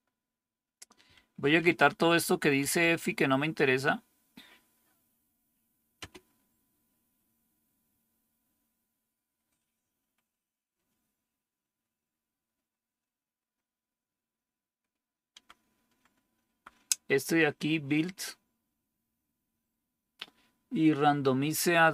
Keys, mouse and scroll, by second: 1.0 Up, 1.3 Up, 1.5 Up, 1.7 Up, 1.9 Down, 2.1 Down, 2.3 Up, 5.9 space, 15.2 Down, 15.8 Down, 16.3 Down.